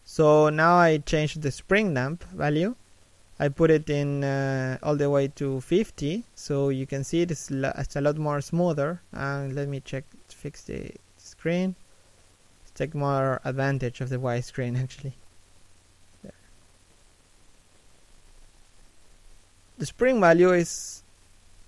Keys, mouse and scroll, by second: 2.5 middle click, 4.2 shift+middle click, 4.4 middle click, 4.7-5.3 scroll up 1.